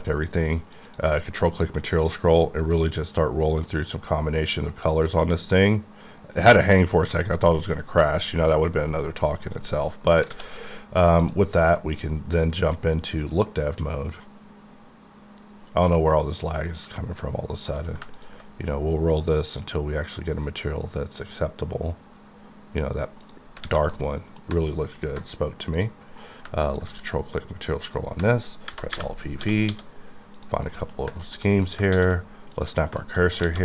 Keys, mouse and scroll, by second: 0.1 ctrl+click, 0.9 ctrl+click, 1.2 click, 1.3-2.5 scroll up 6, 2.5-4.1 scroll up 2, 4.7 scroll up 2, 5.4-6.8 scroll up 1, 6.8-8.0 scroll up 1, 8.1 scroll up 8, 8.7-9.1 scroll up 2, 9.5 click, 10.0 middle click, 10.4 alt+a, 11.3 click, 16.7 click, 17.7 alt+m, 18.2 ctrl+click, 18.5-20.1 scroll up 8, 20.1-21.3 scroll up 2, 21.3 scroll up 1, 22.0 scroll up 2, 22.2 scroll down 2, 22.6 scroll up 1, 23.4 click, 23.6 typing, 24.0 middle click, 25.8 click, 26.2 alt+m, 26.7 ctrl+click, 27.2 scroll up 3, 27.9 click, 28.2 alt+click, 28.7 alt+v, 29.6 typing, 30.4 middle click, 31.1 shift+middle click, 31.8 shift+click, 32.0 shift+s, 33.0 shift+click, 33.2 shift+middle click, 33.5 alt+a.